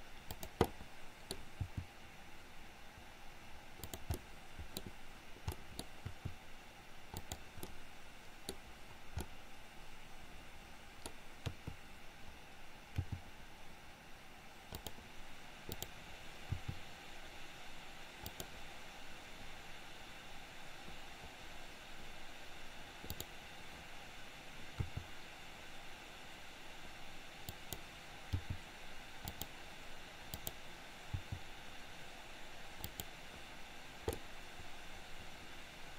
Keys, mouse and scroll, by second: 0.8 middle click, 1.3-1.7 scroll down 1, 1.7 g, 4.2 middle click, 4.8-5.5 scroll down 1, 5.5 scroll up 1, 6.2 r, 7.7-8.5 middle drag, 9.3-11.0 middle drag, 11.4 KP_3, 13.0 g, 15.7 click, 16.4 r, 23.0 click, 25.0 r, 28.4 g, 30.4 click, 31.2 g, 34.3-35.9 middle drag.